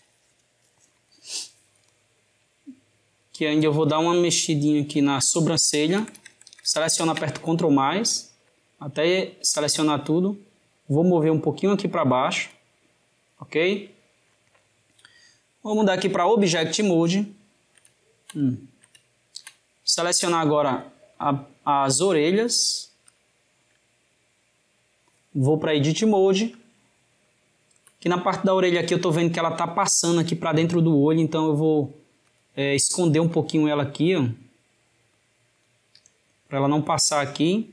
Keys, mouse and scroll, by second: 3.7 click, 4.7 shift+click, 5.7 ctrl+KP_Add, 8.3 click, 15.6-17.1 drag, 17.1-19.7 shift+middle drag, 19.7 click, 22.9 shift+click, 25.5-27.0 drag, 27.0-28.2 ctrl+middle drag, 28.2 click, 29.9 g, 33.2 click, 33.6 g, 36.0-37.7 shift+middle drag.